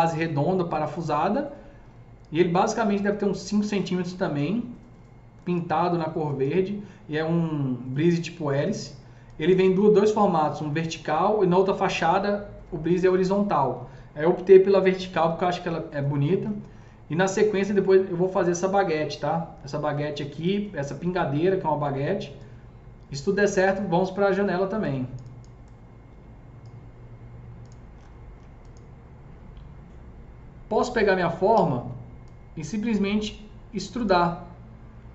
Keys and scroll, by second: 31.6 e.